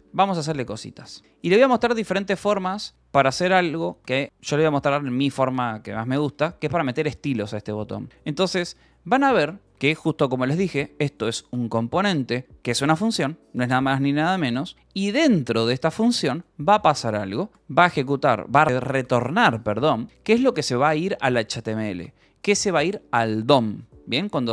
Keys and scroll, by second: 0.0-3.4 typing, 9.7 k, 10.7 j, 12.1 Escape, 12.3 k, 15.4 j, 17.7 k, 18.4 Escape, 18.5 k, 19.0 shift+v, 19.7 j, 22.4 Escape.